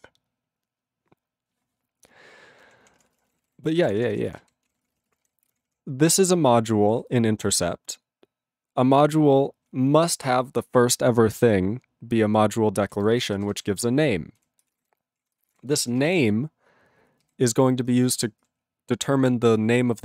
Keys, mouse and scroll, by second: 2.7 ctrl+p, 3.0 ctrl+space, 3.1 ctrl+e, 3.1 ctrl+n, 3.3 ctrl+e, 3.3 ctrl+n, 3.4 ctrl+e, 3.4 ctrl+n, 3.7 ctrl+p, 3.8 ctrl+a, 3.9 ctrl+p, 4.0 ctrl+space, 4.1 ctrl+e, 4.1 ctrl+n, 4.3 ctrl+e, 4.4 ctrl+g, 4.7 ctrl+p, 4.8 ctrl+space, 4.9 ctrl+e, 4.9 ctrl+n, 5.2 ctrl+g, 5.4 ctrl+p, 6.6 ctrl+=, 10.2 ctrl+space, 10.3 ctrl+e, 12.8 ctrl+g, 13.1 ctrl+b, 13.3 ctrl+space, 13.7 ctrl+alt+b, 14.4 ctrl+g, 14.6 ctrl+space, 14.7 ctrl+e, 14.8 ctrl+g, 15.2 ctrl+a, 15.4 ctrl+space, 15.4 ctrl+e, 15.5 ctrl+g, 15.7 ctrl+b, 15.8 ctrl+space, 16.2 ctrl+alt+b, 17.2 ctrl+g, 17.9 ctrl+space, 18.4 ctrl+alt+f.